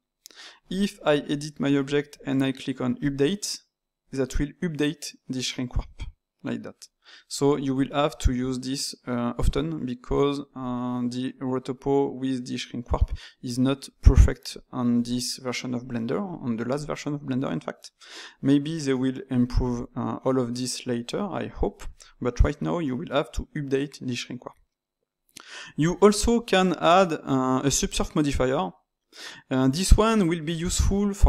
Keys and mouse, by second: 3.0-5.7 drag, 5.7-8.8 middle drag, 14.6-22.9 middle drag, 28.5-30.7 drag, 30.7-31.2 ctrl+middle drag.